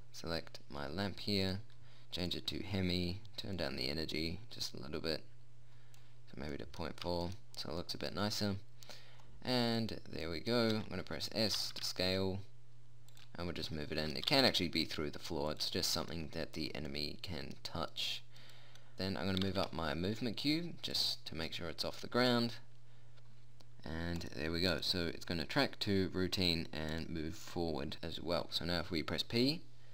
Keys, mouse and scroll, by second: 0.2-2.7 drag, 6.6 middle click, 8.4-10.8 right drag, 11.2 s, 12.0 g, 14.8 g, 18.4-20.7 right drag, 19.9 g, 24.7 click, 29.8 p.